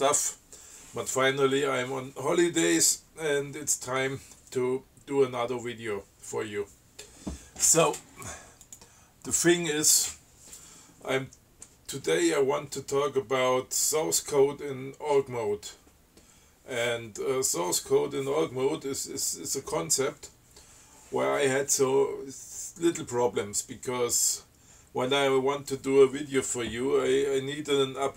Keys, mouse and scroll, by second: 8.9 click.